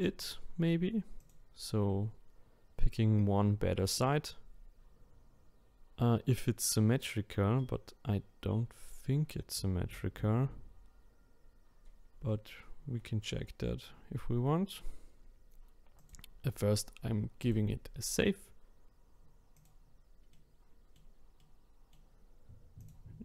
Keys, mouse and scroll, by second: 1.2 click, 16.0-19.7 drag, 20.3-22.8 middle drag, 22.8 click.